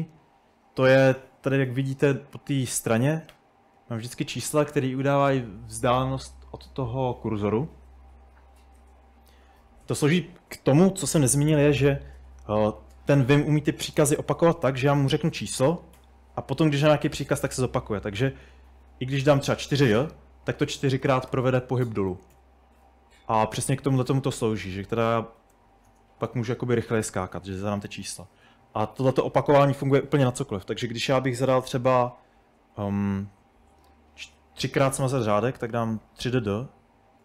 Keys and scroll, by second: 0.9-1.2 typing, 9.1-10.1 typing, 16.0 4, 17.3-18.0 typing, 21.1-22.9 typing, 25.2-26.8 typing, 34.8 typing, 35.8 typing.